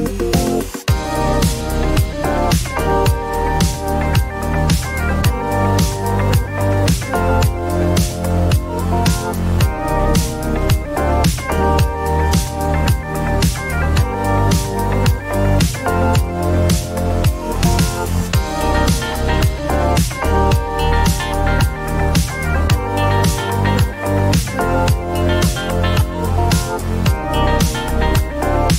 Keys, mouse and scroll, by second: 2.9 click, 5.5 click, 7.3 click, 9.2-11.7 typing, 14.8-16.2 typing, 20.0 click, 20.7 click, 21.7 click, 24.5 click.